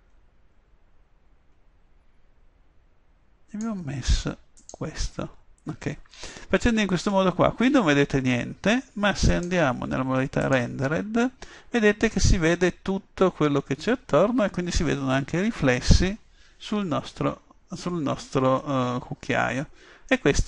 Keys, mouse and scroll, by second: 4.7-6.6 drag, 9.3-11.2 drag.